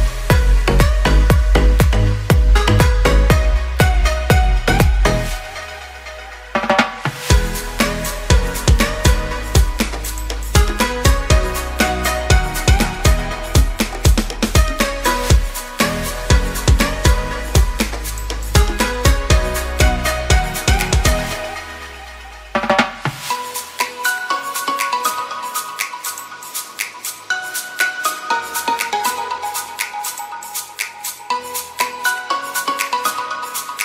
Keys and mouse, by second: 0.8-1.2 drag, 1.4 shift+drag, 2.4 KP_3, 3.1 z, 3.8 z, 4.1 ctrl+r, 6.0 3, 6.5 x, 8.4 i, 10.6 click, 11.1 i, 13.6 shift+click, 14.5 x, 15.8 1, 16.5 shift+click, 20.4 f, 20.8 shift+click, 23.5 shift+click, 23.7 f, 24.0 shift+click, 25.7 shift+f, 25.9 shift+click, 27.6 f, 27.6 a, 27.9 shift+click, 28.3 ctrl+s, 28.6 shift+click, 29.3 ctrl+r, 31.0 shift+click, 31.3 ctrl+r, 33.4 shift+click.